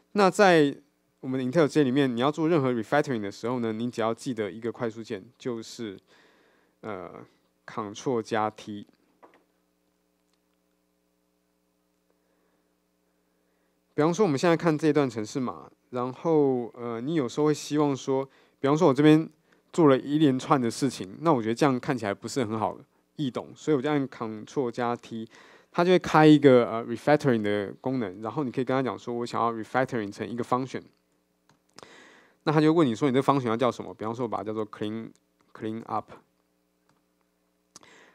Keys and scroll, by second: 7.4 super+F8, 25.4 ctrl+alt+t, 32.0 alt+super+m.